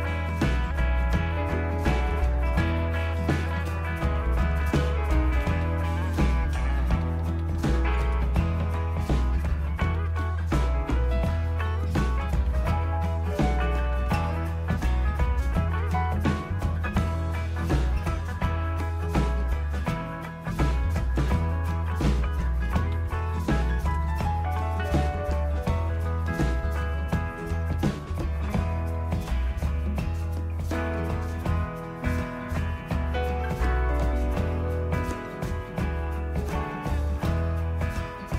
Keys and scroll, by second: 5.4 typing, 7.0-8.2 typing, 9.7-19.2 typing, 21.2-30.8 typing, 36.8 typing, 37.9-38.3 typing.